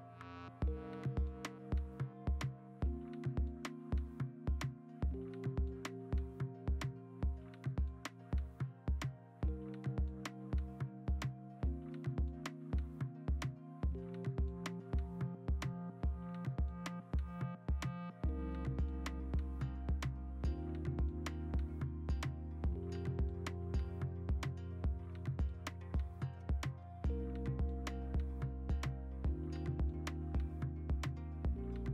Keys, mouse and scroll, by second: 0.3 ctrl+alt+z, 0.4 ctrl+alt+z, 4.4 b, 5.6 ctrl+z, 6.8 b, 7.3 ctrl+z, 8.3 x, 9.0 b, 9.4 x, 9.9 x, 10.4 ctrl+z, 11.5 ctrl+z, 11.6-12.1 typing, 12.7 ctrl+z, 13.1 ctrl+z, 13.3 3, 13.9 x, 15.8 ctrl+z, 16.2 2, 19.9 ctrl+z, 20.0 x, 20.4 ctrl+z, 20.5 ctrl+d, 22.6 scroll, 23.6 b, 25.3 x, 26.3 ctrl+alt+z, 26.4 ctrl+alt+z, 27.6 ctrl+z, 28.0 ctrl+d, 28.7 x.